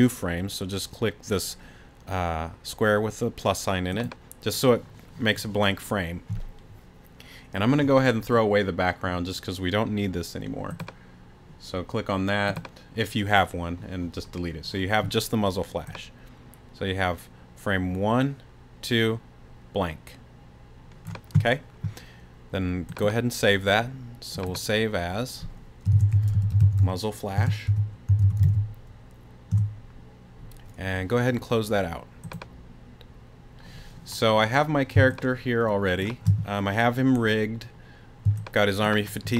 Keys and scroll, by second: 25.9-29.4 typing, 29.5 Return, 35.0 space, 38.3 space.